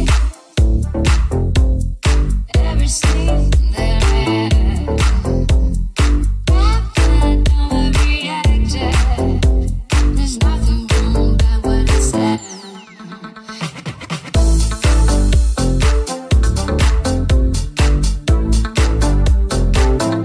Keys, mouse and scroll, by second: 0.0-2.7 drag, 0.0-9.2 middle drag, 2.7 Tab, 3.9 g, 9.2 right click, 9.3-14.6 middle drag, 9.6 s, 13.8 g, 15.0 alt+middle click, 15.3-20.2 middle drag, 18.1 Tab, 18.9 r, 19.8 Tab.